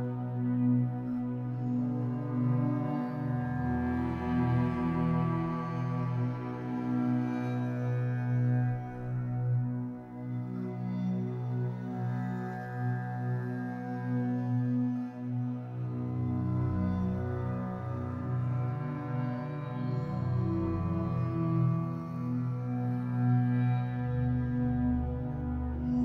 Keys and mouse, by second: 1.6 click, 2.8 click, 5.2 click, 9.2 click, 11.5 click, 13.5 click, 15.0 click, 16.0 click, 17.5 g, 19.1-21.7 drag, 21.8 click, 22.9-25.0 ctrl+alt+drag.